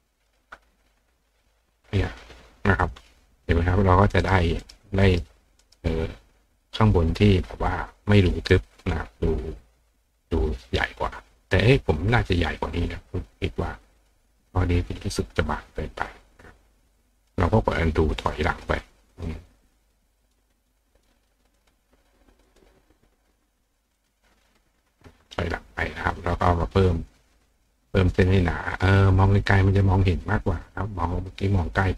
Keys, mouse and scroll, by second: 0.0 click, 0.3 click, 2.2 click, 2.8 click, 4.0 click, 4.2 right click, 4.6 right click, 5.1 right click, 5.6 right click, 6.6 click, 8.8 click, 9.3 click, 17.2 click, 17.7 click, 18.2 click, 18.7 click, 19.1 click, 19.5 click, 19.8 click, 20.2 click, 20.6 click, 20.9 click, 21.6 click, 22.5 click, 24.0 click, 27.5 click, 28.1 click, 30.3 click.